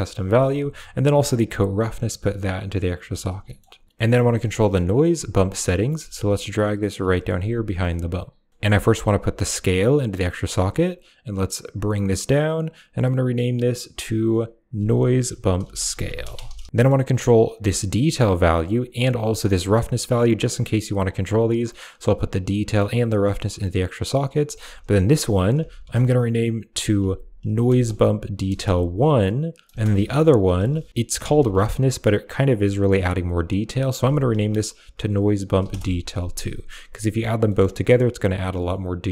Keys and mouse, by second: 0.2 middle click, 1.0-2.8 drag, 2.8 typing, 3.3 middle click, 3.8 middle click, 4.1 middle click, 5.3 middle click, 5.6 right click, 5.8 g, 6.7 click, 7.0 middle click, 7.5 middle click, 8.4 click, 9.2-9.9 drag, 11.6 click, 12.4 click, 12.5-16.7 drag, 13.0 typing, 16.7 middle click, 17.7 click, 18.9-20.4 drag, 21.5-22.2 drag, 22.6-23.3 drag, 24.4 click, 24.5-25.8 drag, 25.9-30.5 drag, 30.9-33.4 ctrl+drag, 33.5-35.6 ctrl+drag, 37.3 middle click, 38.3 middle click.